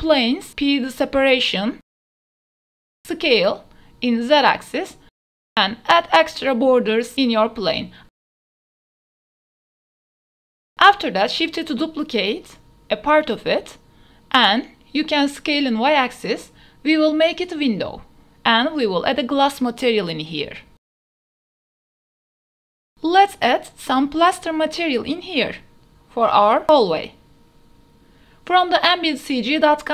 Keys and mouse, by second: 0.3 shift+click, 2.0-3.7 typing, 3.4 KP_Enter, 4.1 click, 4.3 ctrl+z, 4.4 ctrl+z, 4.5 ctrl+z, 5.0 ctrl+y, 5.5-9.2 typing, 6.5 KP_Enter, 8.4 click, 11.0 click, 11.9 r, 12.2 z, 12.4 KP_9, 12.5 KP_0, 12.9 KP_Enter, 14.1 KP_Decimal, 15.1-16.8 drag, 18.1 s, 18.5 y, 21.9 KP_0, 22.2 g, 22.6-23.3 drag, 24.5 click, 25.2 click, 26.1-26.7 typing, 26.8 Return.